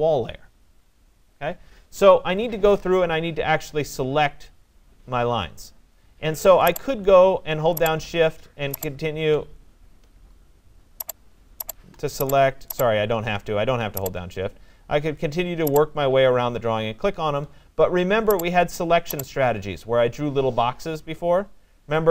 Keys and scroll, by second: 1.8 Escape.